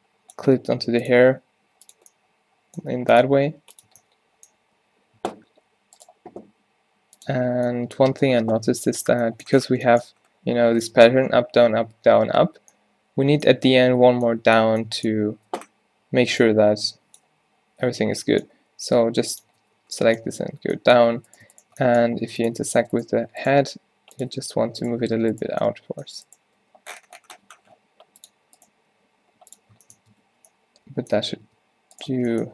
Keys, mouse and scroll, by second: 0.9 e, 1.4 s, 2.9 g, 3.5 g, 3.9 Tab, 5.2 Tab, 7.4 Tab, 8.8 o, 15.4 Tab, 17.4 z, 18.6 e, 19.5 Tab, 19.8 z, 20.7 Tab, 22.1 g, 23.7 g, 24.5 z, 26.6 g, 29.0 g, 30.0 Tab, 30.3 z, 31.3 Tab, 31.5 Tab, 32.2 Tab.